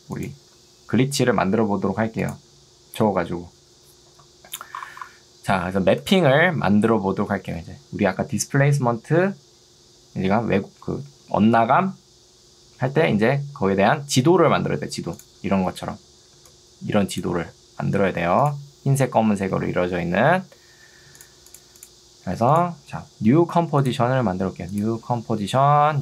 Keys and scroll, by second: 16.4 ctrl+2, 17.4 ctrl+z.